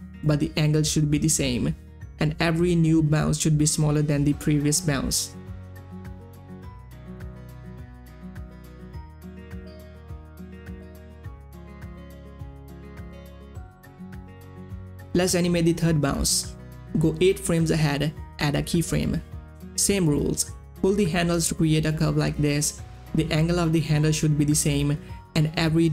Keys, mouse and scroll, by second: 11.1 click, 11.6 space, 12.6-15.1 drag, 17.1 click, 17.2 shift+Page_Down, 17.7 Page_Up, 19.2-22.4 drag, 22.4 Page_Up, 24.1-25.9 drag.